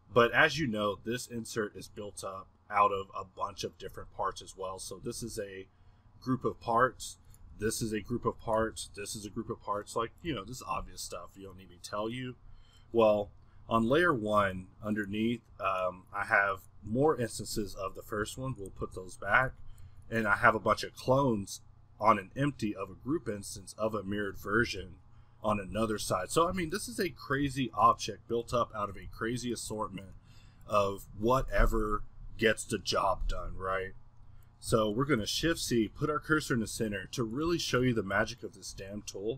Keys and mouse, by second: 4.0-7.5 middle drag, 7.5 g, 8.5 middle click, 8.6 g, 9.6-10.2 drag, 10.2-13.8 middle drag, 14.7 click, 14.8-18.2 middle drag, 18.2 m, 19.5 a, 19.9 a, 20.3 g, 24.8 m, 25.9 1, 26.5 a, 27.5-29.1 middle drag, 29.1 a, 30.1-34.7 middle drag, 34.7 a, 36.4-38.2 middle drag, 38.2 a, 38.7 a.